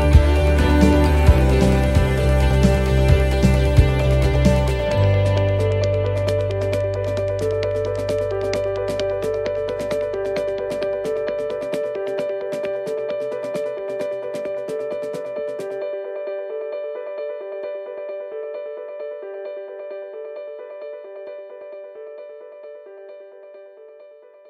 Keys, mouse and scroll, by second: 2.7 shift+middle click, 3.2 scroll down 1, 4.3 click, 4.3 scroll down 1, 5.5 shift+middle click, 6.6 scroll down 1, 7.3 right click, 9.3 shift+d, 11.4 click, 13.5 click, 16.2 shift+middle click, 16.5 scroll up 5, 16.9 middle click, 17.4 shift+middle click, 18.8 click, 21.6 middle click, 22.1 shift+middle click, 23.2 click.